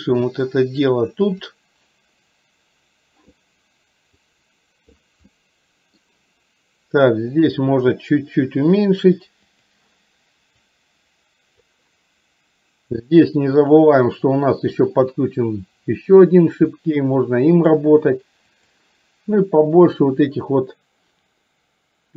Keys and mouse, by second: 1.4 click, 4.2 click, 5.4 middle click, 7.4-8.9 drag, 9.6 click, 10.7-11.8 drag, 14.9-17.8 drag, 18.6 click, 20.0-22.1 drag.